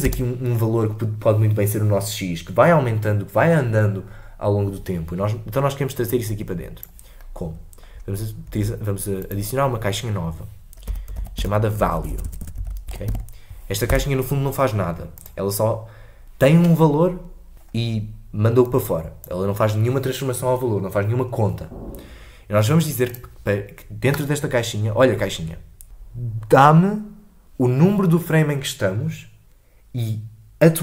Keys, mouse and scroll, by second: 0.0 space, 19.3-30.8 drag.